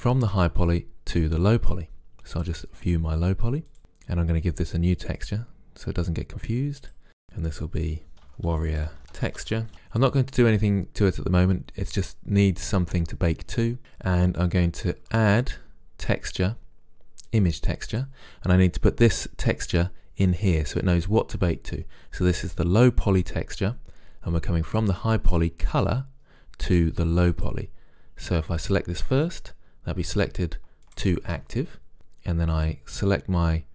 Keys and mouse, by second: 2.5-3.8 drag, 5.3-6.8 drag, 8.7 r, 14.9 shift+a, 18.0 click, 19.7 click, 24.7-26.5 drag, 30.3 click, 32.4-33.7 drag.